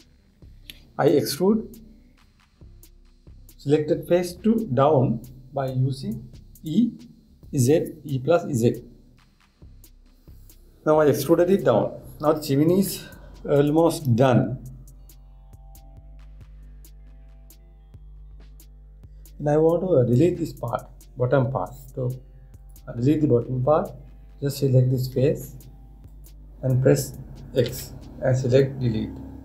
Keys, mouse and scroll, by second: 23.2 click, 26.7 click, 28.2 x.